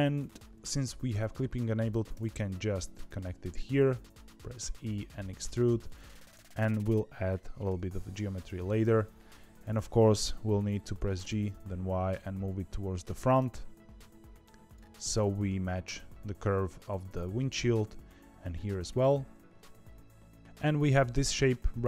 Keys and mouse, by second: 2.1 e, 7.6 KP_7, 10.9 g.